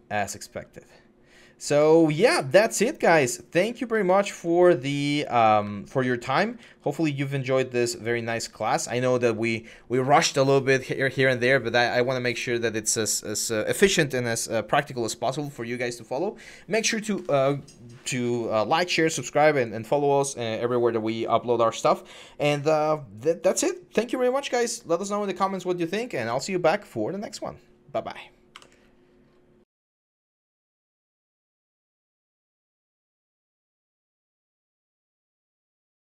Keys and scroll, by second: 0.0-8.6 typing, 28.3 Escape.